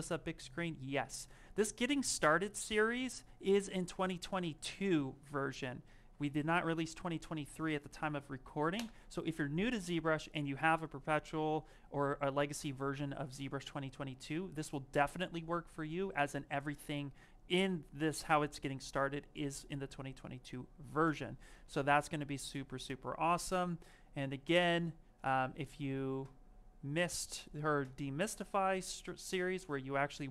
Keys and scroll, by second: 0.8 Escape, 6.9 ctrl+v, 8.6 Return, 29.9 alt+Tab.